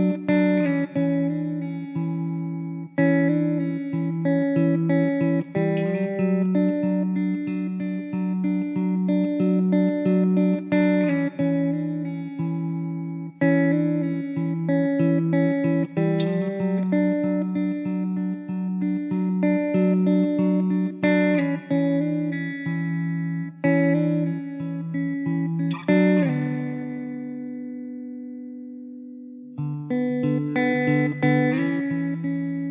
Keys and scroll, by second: 0.4 shift+d, 2.6 shift+d, 5.9 shift+d, 9.2 KP_0, 21.6 Delete, 22.6 Delete, 25.5 shift+d, 31.9 shift+d.